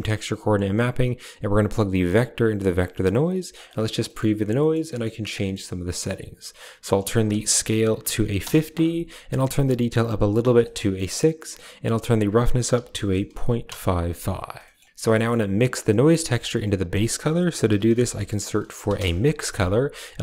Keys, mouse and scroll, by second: 1.7-2.6 drag, 2.9 drag, 3.4 ctrl+shift+click, 5.8 middle click, 6.7-8.3 drag, 9.9-10.4 drag, 10.7 middle click, 11.7-13.6 drag, 13.3 5, 14.5 middle click, 15.0 middle click, 15.9 click, 16.0 g, 16.5 a, 17.0 shift+a.